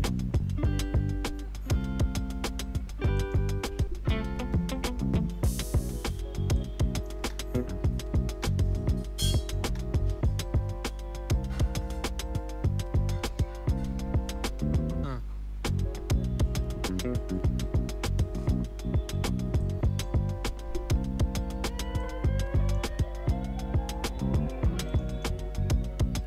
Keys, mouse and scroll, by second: 0.6 typing, 3.1 click, 4.1 n, 6.5 click, 7.1 space, 9.2 click, 9.6 space, 12.9 typing, 17.4 space, 19.6-24.9 drag.